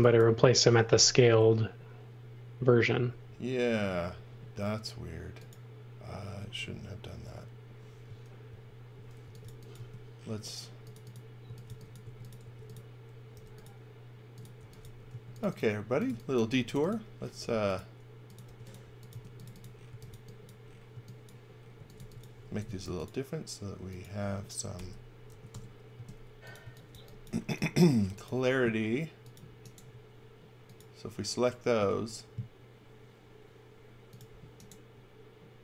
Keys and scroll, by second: 3.1 super+z, 4.1 super+z, 8.5 super+z, 9.0-9.9 typing, 11.2-17.4 typing, 18.5-22.6 typing, 24.7-27.9 typing, 25.5 Return, 31.7 space.